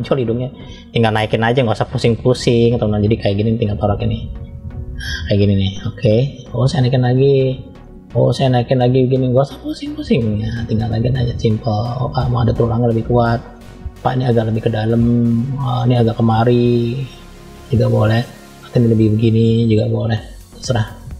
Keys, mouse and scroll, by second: 1.3-3.5 middle drag, 4.2 click, 6.4 click, 7.2 click, 7.7 middle click, 8.7 click, 10.3 click, 10.9 click, 11.5 click, 12.3 middle click, 13.1 middle click, 14.1 click, 14.8 click, 15.6 middle click, 16.4 click, 17.0 click, 17.4 click, 18.1 middle click, 19.5 click.